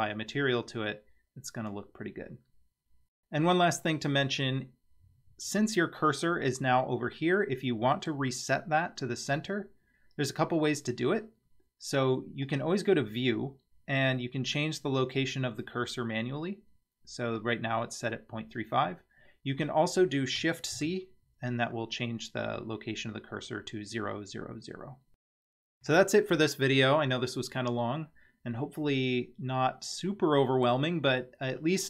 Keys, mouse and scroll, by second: 0.0 scroll up 3, 0.5 scroll down 2, 0.9-3.2 middle drag, 7.2-8.1 middle drag, 12.5 click, 20.8 shift+c, 25.3 middle click, 30.1-30.7 middle drag.